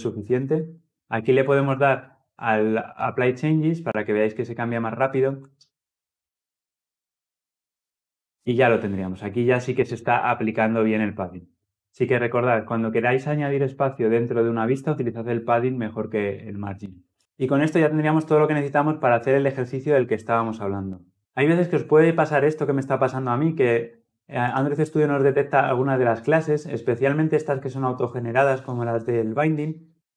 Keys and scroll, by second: 3.3 ctrl+F10.